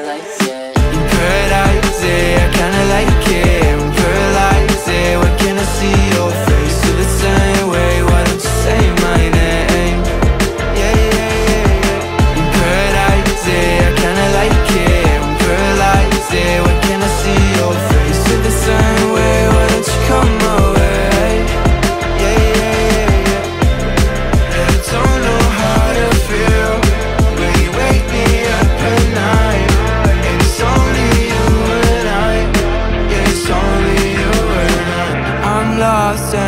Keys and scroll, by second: 4.1 ctrl+g, 6.4 shift+Up, 7.0 Escape, 10.5 Down, 11.1 Escape, 12.3 space, 14.3 Up, 15.2 Escape, 16.1 Up, 21.1 Up, 22.3 space, 24.0 space, 25.5 o, 26.6 shift+space, 30.4 ctrl+shift+g, 31.3 ctrl+shift+g, 33.2 alt+Left.